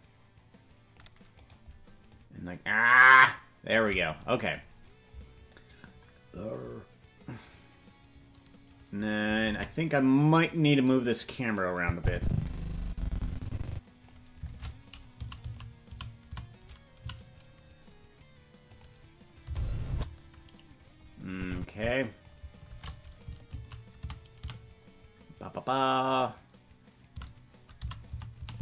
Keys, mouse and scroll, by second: 1.5 right click, 2.1-3.8 drag, 4.5-5.0 scroll up 2, 9.5 ctrl+Tab, 10.4-11.8 right drag, 11.8-14.1 drag, 14.5 shift+`, 19.4 space, 19.9 space, 21.3-22.3 drag, 22.7 shift+`.